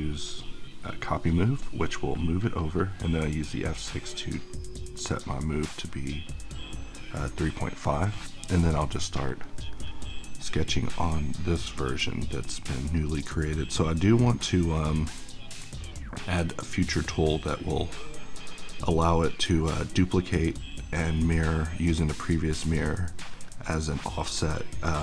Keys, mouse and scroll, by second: 0.9-5.9 drag, 5.9-7.8 middle drag, 10.4-25.0 drag.